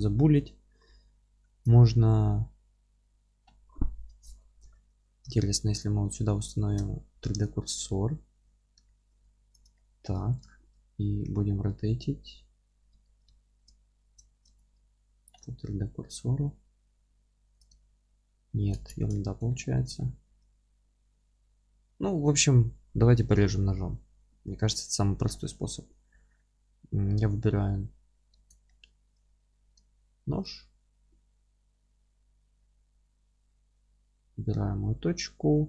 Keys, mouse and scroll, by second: 1.4 ctrl+z, 4.7 2, 5.8 click, 7.4 shift+s, 7.9-9.5 alt+middle drag, 8.5 1, 9.5 click, 9.7-16.1 alt+middle drag, 11.3 r, 16.1-17.6 right drag, 16.1 r, 17.6 click, 17.8-35.6 alt+middle drag, 18.8 ctrl+z, 19.7 scroll up 1, 22.5-23.3 scroll up 1, 23.3 KP_1, 24.6-25.3 scroll up 1, 27.5-27.8 scroll down 1, 28.4 alt+z, 30.2 alt+c.